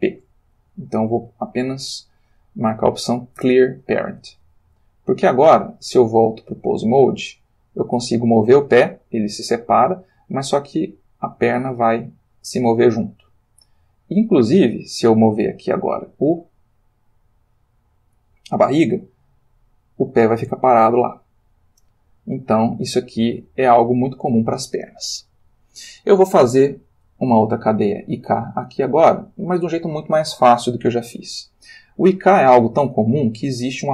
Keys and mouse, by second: 3.4 Return, 4.2 Tab, 5.8 click, 6.6 g, 14.2 Escape, 16.0 click, 18.6 g, 24.2 Escape, 27.2 click.